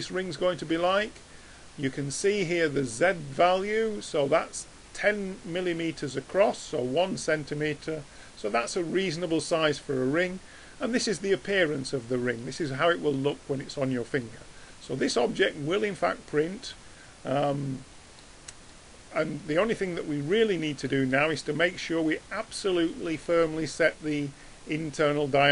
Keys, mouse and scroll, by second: 9.7-12.2 middle drag, 14.4-14.8 middle drag, 18.7-25.5 middle drag.